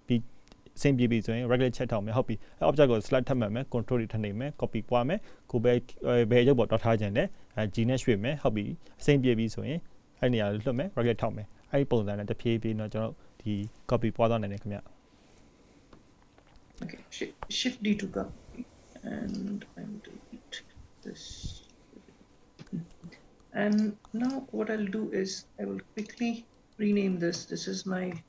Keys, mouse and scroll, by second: 6.2 click, 6.6 shift+d, 9.5 click, 11.2 shift+d, 19.5 click, 21.1 right click, 23.9 click, 24.5 click, 26.1 click, 27.5 click.